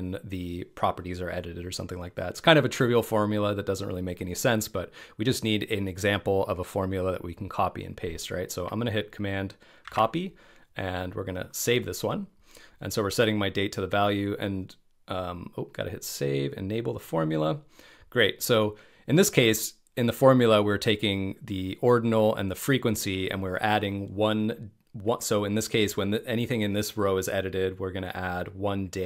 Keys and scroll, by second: 8.8 super+a, 9.8 super+c.